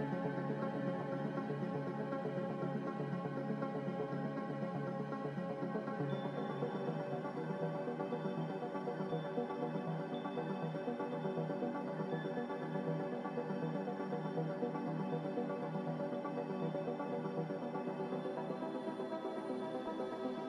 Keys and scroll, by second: 7.9 z.